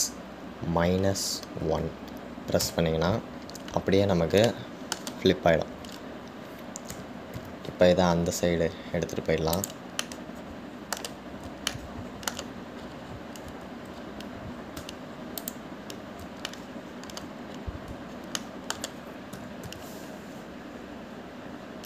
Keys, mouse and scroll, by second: 5.7-8.1 middle drag, 8.1 g, 11.2-14.2 middle drag, 14.2-14.8 scroll up 2, 14.8-16.0 scroll up 4, 16.0 `, 17.7-19.5 shift+middle drag, 18.7-19.5 scroll up 3, 19.5-20.5 shift+middle drag, 20.5 g.